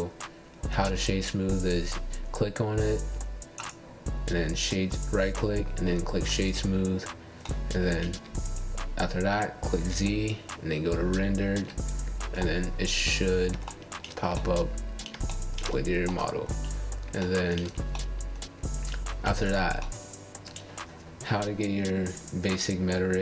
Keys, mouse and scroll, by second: 0.4-4.5 right drag, 6.8 scroll up 1, 6.9-7.4 middle drag, 7.4 scroll down 1, 7.7 click, 8.1-9.4 right drag, 9.5-10.9 middle drag, 11.0 z, 11.9 z, 12.6-14.7 middle drag, 14.7 KP_1, 16.1 KP_7, 16.6 KP_1, 17.1 KP_3, 20.1 click, 21.1 click, 21.6 Tab, 22.3 click.